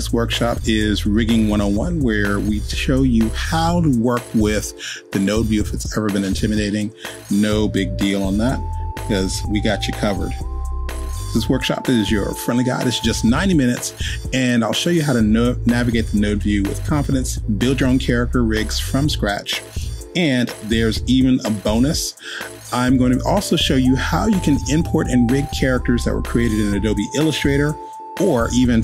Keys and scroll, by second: 0.7 super+v, 8.5 super+v, 25.1 Return, 25.2-27.2 typing, 26.3 Return.